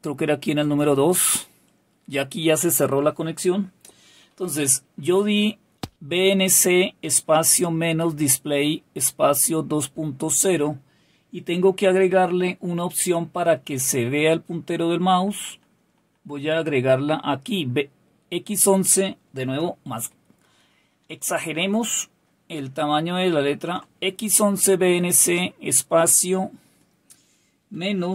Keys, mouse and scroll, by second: 0.5 click, 5.7 Up, 13.9 Left, 14.2-14.9 typing, 15.1 Left, 15.3 Left, 15.4 Left, 15.6 Left, 15.8 Left, 16.0 Left, 16.1 Left, 16.4 Left, 16.7 Left, 17.0 Left, 19.9 ctrl++, 20.2 ctrl++, 20.5 ctrl++, 20.7 ctrl++, 20.9 ctrl++, 21.5 ctrl++, 21.8 ctrl++, 22.1 ctrl++, 22.4 ctrl++, 22.6 ctrl++, 23.1 ctrl++, 24.8 Right, 27.5-28.1 typing.